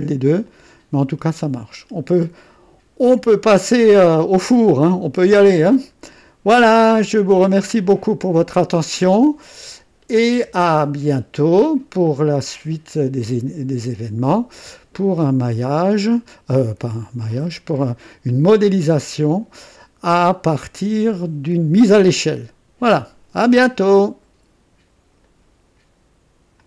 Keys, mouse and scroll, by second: 0.4-4.3 drag, 5.2-5.8 scroll down 2, 8.1 click, 10.2 space, 10.2 space, 12.0-12.3 scroll down 1, 13.2 &, 14.1-14.5 scroll down 1, 14.8 scroll down 1, 15.2-17.2 drag, 17.2 right click, 18.3-21.0 drag, 22.3 click, 23.4 click, 25.2 right click, 26.5 click.